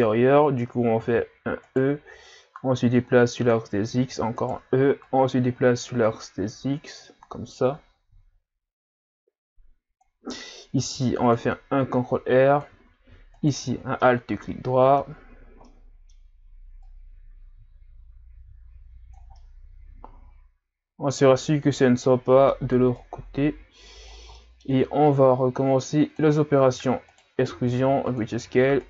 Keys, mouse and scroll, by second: 0.1-0.8 scroll up 1, 0.8 scroll up 1, 1.0 e, 2.6 click, 4.0 e, 5.0 click, 10.8 ctrl+r, 13.3 alt+right click, 13.7 scroll down 5, 14.0-15.1 middle drag, 15.1-15.6 scroll up 5, 15.6-16.9 middle drag, 16.9 click, 19.4-21.8 middle drag, 21.8-22.2 scroll up 1, 22.2 middle click, 23.0 click, 24.3 middle click, 25.1 click, 26.7 e, 27.5 s, 28.5 e.